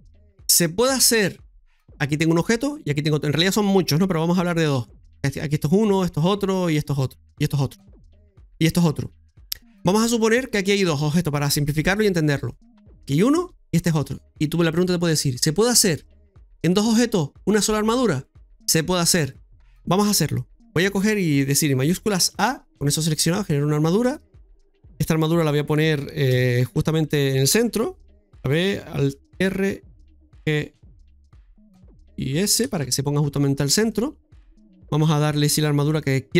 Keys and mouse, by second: 2.3 right click, 5.3 right click, 6.2 right click, 6.9 right click, 7.5 right click, 9.2 right click, 13.0 right click, 13.8 shift+right click, 22.2 shift+a, 26.3 KP_7, 29.3 alt+r, 31.0 alt+g, 32.6 alt+s, 33.8 middle click.